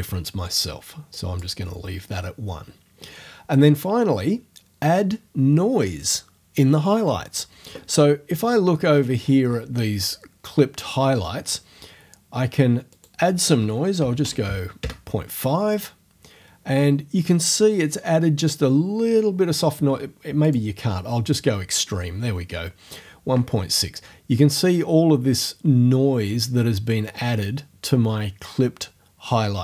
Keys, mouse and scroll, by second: 1.1 click, 8.4-8.8 scroll up 1, 8.8 scroll down 1, 8.9-9.7 scroll up 1, 9.7-12.5 scroll down 1, 12.9 click, 13.7-14.7 typing, 14.8 Return, 20.4 click.